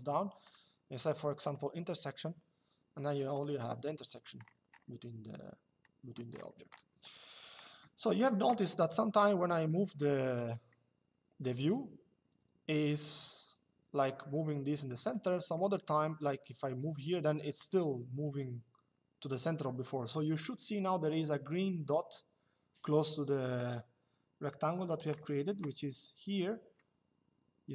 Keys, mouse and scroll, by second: 0.1 click, 3.0 click, 10.4 shift+middle click, 15.1 middle click, 15.6 shift+middle click, 26.4 shift+middle click.